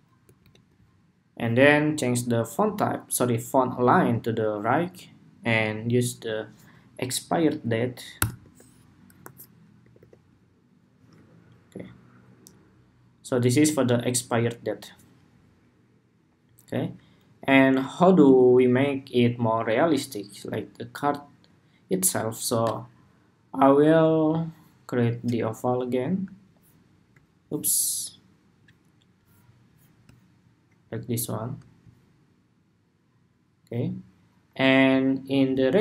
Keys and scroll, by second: 0.1 alt+Left.